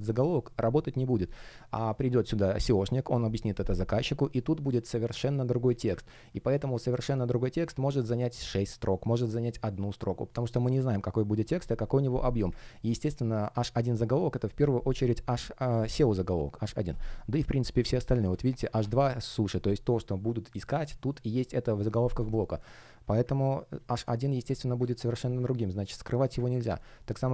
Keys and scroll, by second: 22.1 space, 24.8 space.